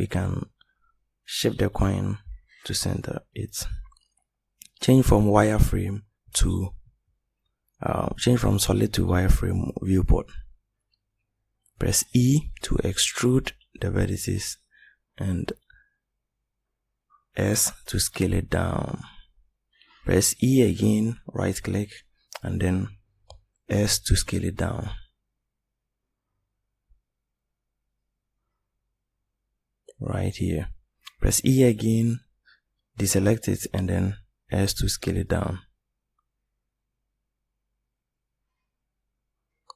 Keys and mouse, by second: 11.2 e, 13.3 s, 20.5 e, 24.5 s, 30.3 e, 33.5 s.